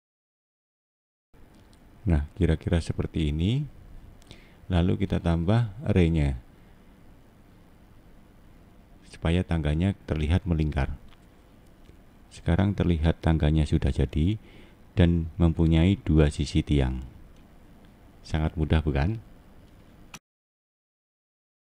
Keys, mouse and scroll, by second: 0.0-0.4 scroll up 1, 0.4 middle click, 1.5 click, 2.8-3.4 scroll down 1, 3.4 middle click, 4.6 click, 5.0 middle click, 6.6 scroll down 3, 7.2 middle click, 9.7 click, 9.9 click, 10.2 click, 10.4 click, 10.5 click, 10.7 click, 10.9 click, 11.1 click, 11.4-13.4 scroll down 6, 13.4 click, 13.6 click, 13.8 click, 14.0 click, 14.2 click, 14.4 click, 14.5 click, 14.7 Left, 15.6 click, 15.8 click, 16.0 click, 16.2 click, 16.3 click, 16.5 click, 16.7 click, 16.9 click, 17.1 click, 17.3 click, 17.4 click, 17.6 click, 18.3 scroll down 4, 18.8 middle click, 19.8 scroll up 2, 20.2 middle click, 21.1-21.4 scroll up 3.